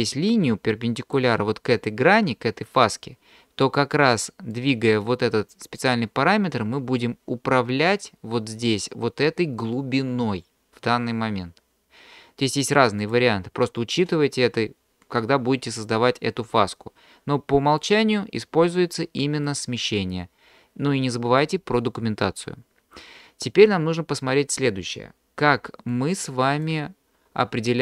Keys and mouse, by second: 0.1-1.2 drag, 4.5-5.9 drag, 13.0-14.8 drag, 17.8-19.7 drag, 25.5 d, 25.9 click, 26.7 d.